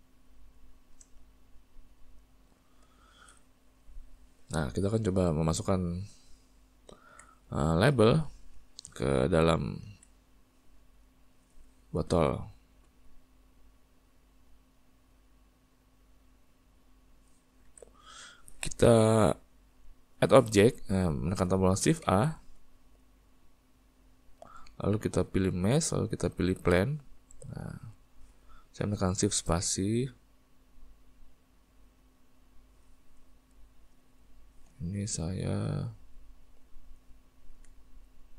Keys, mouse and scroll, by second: 0.1-10.0 ctrl+middle drag, 10.0 alt+a, 11.0 click, 14.0 click, 17.8 alt+a, 31.1 shift+space, 32.1 click, 36.2-38.3 middle drag.